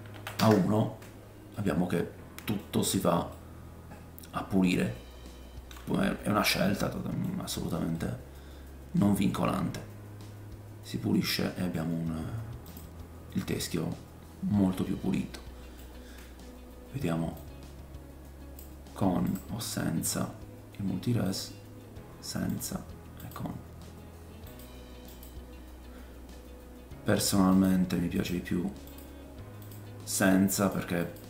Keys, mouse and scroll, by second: 1.5-2.0 middle drag, 3.3 middle click, 6.0 scroll up 2, 6.5 middle click, 7.3-7.9 scroll down 2, 7.9 middle click, 12.7 click, 13.3 middle click, 17.3-19.4 drag, 19.6-21.3 scroll up 5, 21.3-31.2 drag, 21.3 scroll up 1, 23.2 middle click, 23.2 right click, 25.1 middle click, 25.1 right click, 28.2 middle click, 28.2 right click.